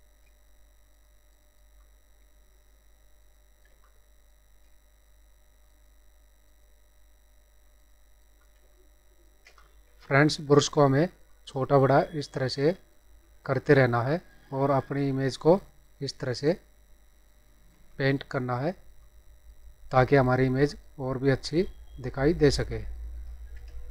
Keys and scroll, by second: 3.6 space, 8.6 space, 23.6 space.